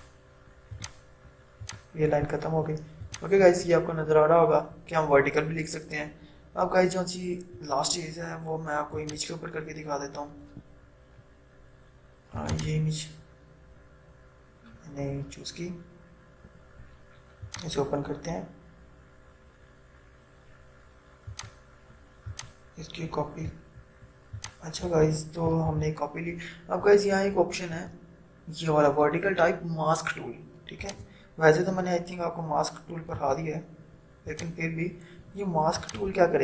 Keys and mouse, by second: 7.6 right click, 9.1 click, 12.5 click, 17.6 click, 21.7-24.5 drag, 25.9 ctrl+0, 28.0 right click, 31.0 click, 33.3 right click, 34.5 click.